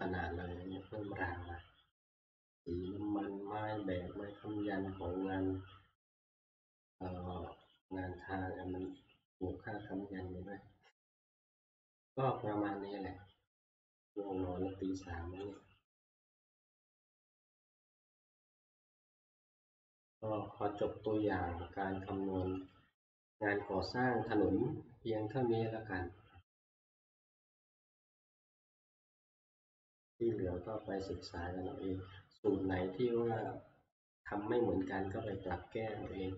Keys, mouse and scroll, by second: 1.6-3.4 middle drag, 1.6 scroll, 4.0-5.0 scroll down 1, 7.8-13.9 drag, 7.8 middle click, 15.6 click, 17.0 click, 19.3 click, 22.8 click, 27.6 click, 30.5 scroll, 33.3 scroll, 33.4 click, 35.5 click.